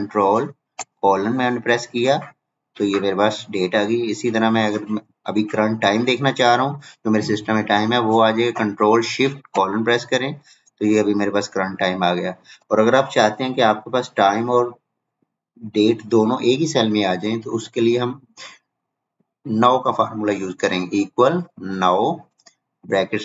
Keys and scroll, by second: 6.9 ctrl+:.